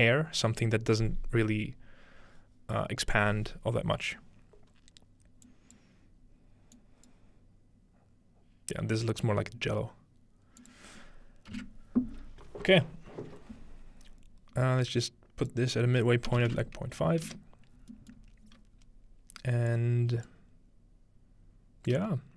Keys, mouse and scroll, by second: 5.4 click, 6.8 click, 10.6 click, 15.4-17.2 drag, 17.7-18.9 scroll down 2, 18.1-19.7 middle drag, 18.9-19.7 scroll up 2, 19.7-22.3 drag.